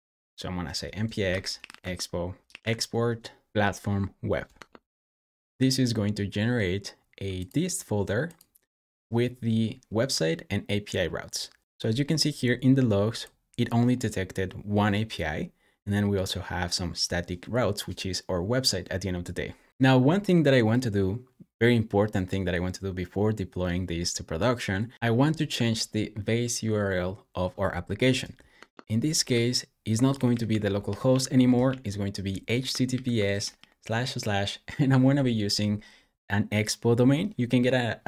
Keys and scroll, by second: 0.4-2.4 typing, 2.5 Up, 3.5 BackSpace, 4.4 Return, 28.4 Escape, 28.8-31.5 typing, 32.7-33.4 typing.